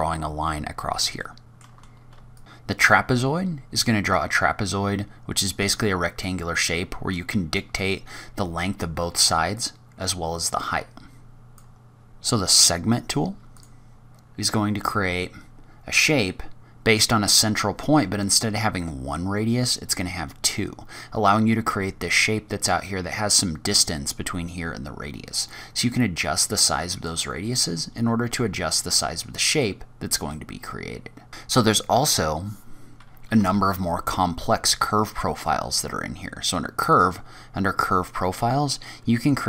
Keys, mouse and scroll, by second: 1.1 shift+middle click, 1.5 shift+right click, 1.6 shift+a, 1.7 click, 1.7 Tab, 1.9 shift+a, 2.7-3.2 scroll down 3, 3.2-3.9 scroll up 3, 3.9 click, 7.5 click, 9.5 click, 11.5 scroll down 2, 11.6 ctrl+z, 11.6 shift+right click, 11.6-12.4 scroll up 5, 11.6 shift+a, 14.3-14.8 scroll down 4, 14.8-15.6 scroll up 3, 25.4 click, 27.3 click, 30.1 click, 33.4 shift+a.